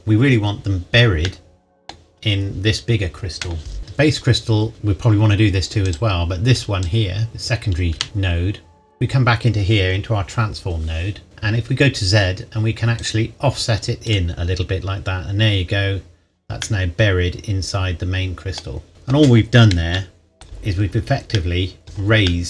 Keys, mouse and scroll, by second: 1.2 middle click, 2.3-3.6 scroll down 1, 3.8 click, 5.8 click, 7.9 Tab, 11.2-11.8 scroll up 1, 13.0 click, 16.6 middle click, 20.6-21.4 scroll down 1, 21.4 middle click, 21.8 KP_1.